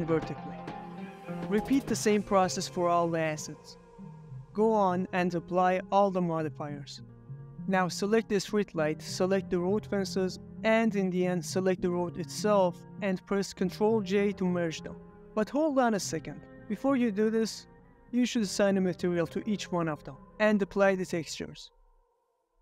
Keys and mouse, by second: 0.9 middle click, 1.1 Tab, 1.4 Tab, 1.4 middle click, 1.4 Tab, 1.6 ctrl+click, 1.9 a, 2.0 ctrl+r, 2.5 Escape, 2.6 click, 3.0 ctrl+r, 3.1 Escape, 3.8 middle click, 4.1 Tab, 4.2 shift+click, 4.4 Tab, 4.4 ctrl+r, 4.4 Escape, 4.4 click, 4.5 Tab, 4.5 click, 4.6 Tab, 4.6 ctrl+r, 4.6 Escape, 4.8 Escape, 5.1 Tab, 5.1 click, 5.2 ctrl+r, 5.2 Escape, 5.3 Tab, 5.4 Tab, 5.4 middle click, 5.6 Tab, 5.6 ctrl+r, 5.8 a, 6.6 ctrl+a, 8.7 click, 9.0 shift+click, 9.9 shift+drag, 12.3 ctrl+j, 12.9 middle drag, 13.2 shift+click, 13.4-14.8 middle drag, 15.0 ctrl+z, 15.6 click, 16.3 click, 16.7-17.3 middle drag, 17.5 middle drag, 17.8 ctrl+middle drag, 18.2-18.8 shift+middle drag, 19.0 ctrl+middle drag, 19.4 shift+middle click, 19.8 middle click, 20.4 click, 21.3 middle click, 21.6 click, 22.0 ctrl+middle drag, 22.4 middle click.